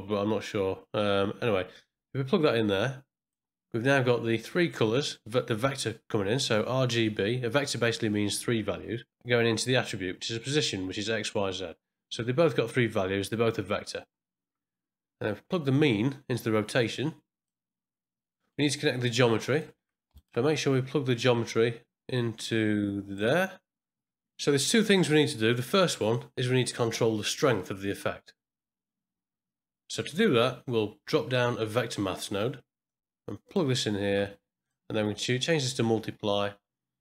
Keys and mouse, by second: 1.7-3.3 drag, 4.4 click, 15.7-17.4 drag, 18.4 middle click, 19.2 click, 20.2 shift+right click, 21.1-23.1 drag, 24.7 middle click, 25.4-27.2 drag, 29.4 middle click, 30.0 shift+a, 34.6-35.7 drag.